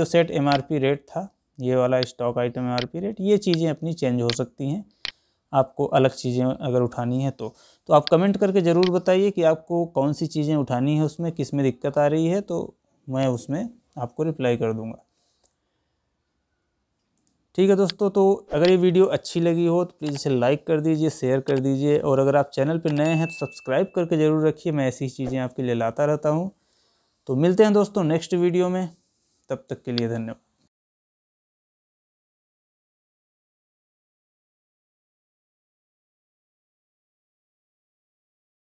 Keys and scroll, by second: 15.5 Escape.